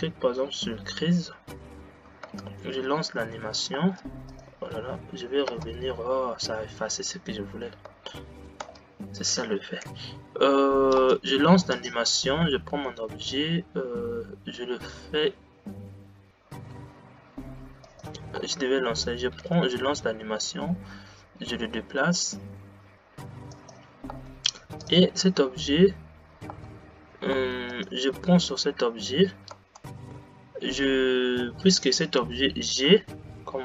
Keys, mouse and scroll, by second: 2.3 space, 3.0 g, 4.4 click, 5.8 space, 8.0 space, 10.2 g, 11.8 click, 13.0 g, 18.5 space, 19.7 g, 24.4 space, 24.9 click, 26.7 space, 27.6 space, 27.8 click, 29.6 space, 32.5 g.